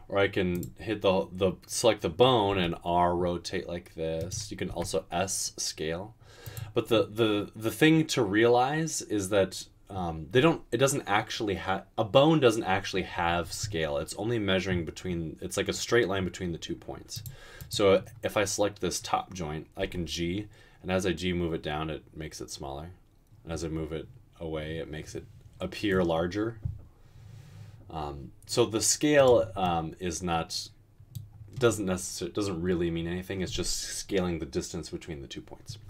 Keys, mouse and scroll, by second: 2.7 typing, 4.7 typing, 19.9 g.